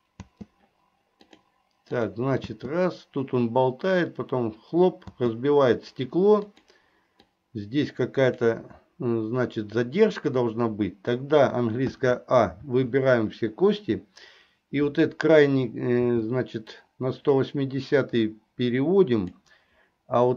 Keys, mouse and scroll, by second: 0.3 space, 1.3 click, 2.1 click, 5.2 space, 6.6 click, 7.4-8.6 drag, 10.6 click, 12.1 a, 12.8 a, 16.2 g.